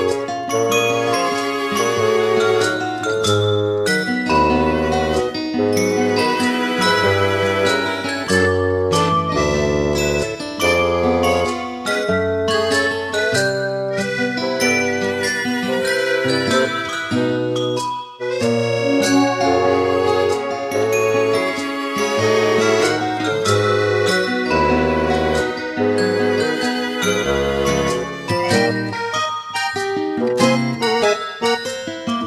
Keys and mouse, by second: 7.1 middle click, 8.2 middle click, 9.6 middle click, 10.5 middle click, 10.9 middle click, 12.8 middle click, 15.4 middle click, 16.6 middle click, 18.1 middle click, 18.6 middle click, 19.2 middle click, 19.6 middle click, 22.4 middle click, 23.3 middle click, 24.0 middle click, 24.6 middle click, 26.0 middle click, 26.9 middle click, 27.7 middle click, 28.4 right click, 29.2 right click, 30.1 middle click, 30.4 right click, 30.7 middle click, 32.1 middle click.